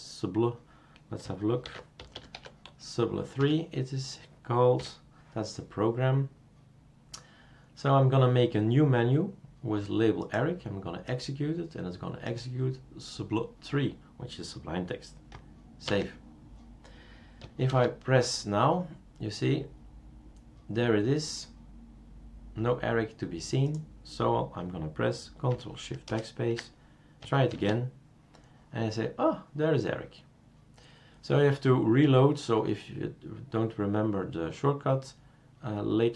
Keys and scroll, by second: 1.6 shift+super+d, 1.7-2.8 typing, 3.4 Escape, 4.8 3, 15.9 ctrl+s, 17.7 super+space, 26.1 ctrl+shift+BackSpace, 27.5 super+space.